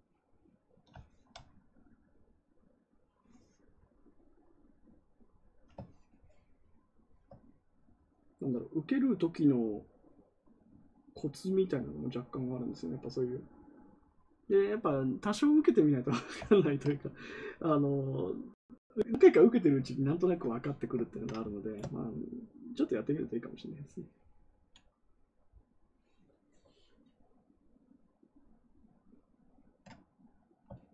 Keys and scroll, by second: 24.5 ctrl+z.